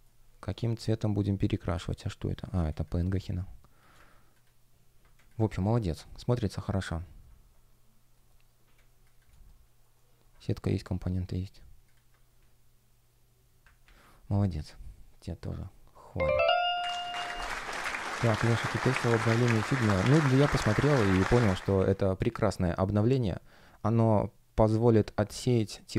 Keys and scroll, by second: 1.6 space, 5.1 space, 8.7 space, 9.2 shift+g, 9.8 shift+o, 13.7 super+w, 21.3 F1.